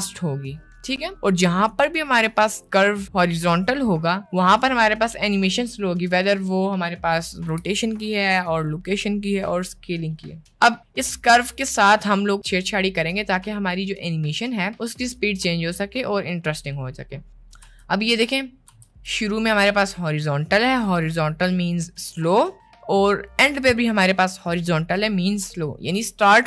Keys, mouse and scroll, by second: 17.6 space, 18.8 space, 19.2-19.6 drag.